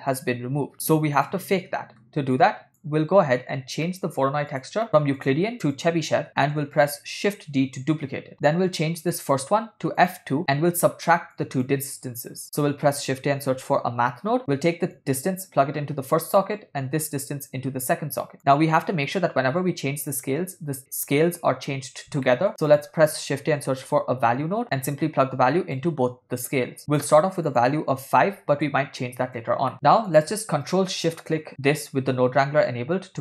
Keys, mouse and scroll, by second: 0.2 click, 1.8 middle click, 2.8 click, 3.9 ctrl+middle click, 4.7 click, 5.1 middle click, 5.6-6.1 drag, 6.3 ctrl+middle click, 6.9 click, 7.6 shift+d, 9.1-10.3 drag, 10.5-10.9 drag, 11.5 click, 13.9 shift+a, 15.0-16.5 drag, 17.5 click, 17.7 click, 18.4 middle click, 22.3 middle click, 22.5 shift+a, 25.0 click, 26.5-27.2 drag, 27.5-28.7 drag, 30.1 middle click, 30.2 click, 31.5 ctrl+shift+click.